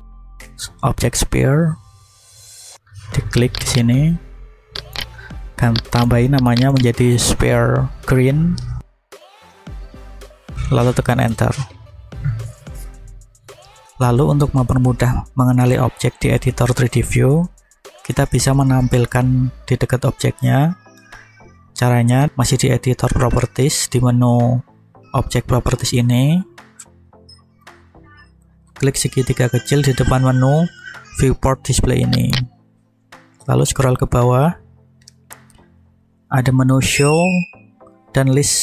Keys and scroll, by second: 8.9 shift+g, 9.1 r, 9.2 e, 9.7 n, 11.1 Return.